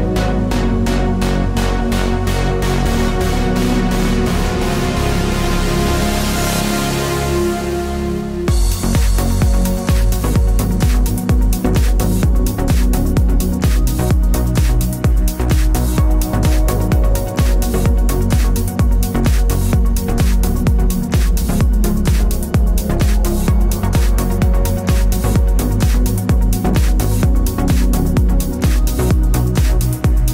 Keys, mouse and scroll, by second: 0.4 t, 1.6 alt+shift+click, 3.6 Return, 4.6 click, 8.3 ctrl+Num_Lock, 8.5 ctrl+o, 9.8 click, 16.4 alt+click, 17.5 click, 20.3 click, 25.7 click, 27.7 ctrl+j, 29.1 click.